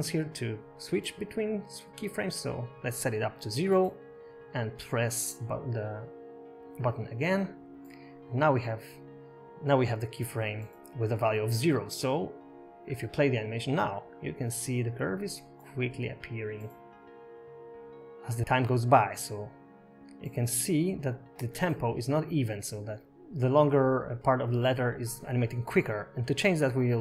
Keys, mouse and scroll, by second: 2.4 click, 3.6 click, 4.7 click, 6.4 click, 8.0 click, 8.4 click, 9.5 i, 11.8 click, 13.6 space, 18.7 space, 19.8 click, 20.6 space, 24.8 space.